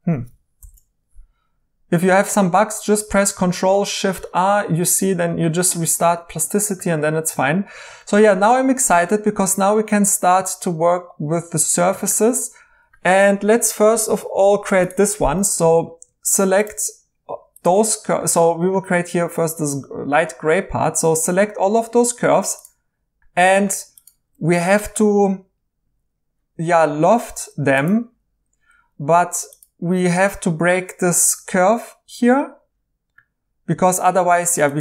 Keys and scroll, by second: 0.6 ctrl+shift+r, 23.2 Escape, 23.7 Escape.